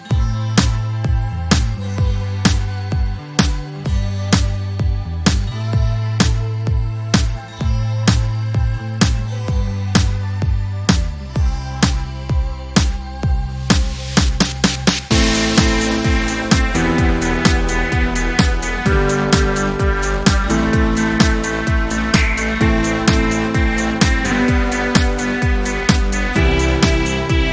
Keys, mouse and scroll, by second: 0.1 click, 0.4 space, 1.0 click, 1.2 space, 2.2 ctrl+scroll down 1, 4.6-5.2 click, 5.5 Delete, 6.2-6.9 ctrl+scroll down 2, 6.9-7.2 ctrl+scroll down 1, 7.2-7.9 drag, 10.4 ctrl+scroll up 1, 11.4-12.4 drag, 12.8-13.7 alt+drag, 17.4-17.8 ctrl+scroll up 1, 18.4-19.7 alt+drag, 20.4-21.0 drag, 24.4-25.6 drag.